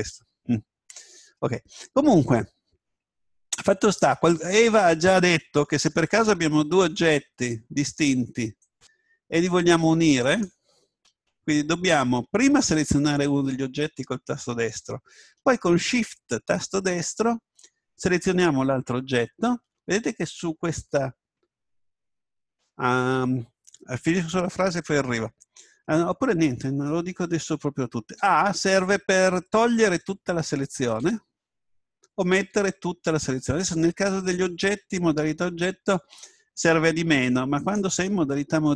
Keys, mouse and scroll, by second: 2.7-4.8 middle drag, 6.8-12.1 right drag, 18.1 right click, 28.2 a, 31.0 a, 32.3 a, 37.6 right click, 38.6 Tab.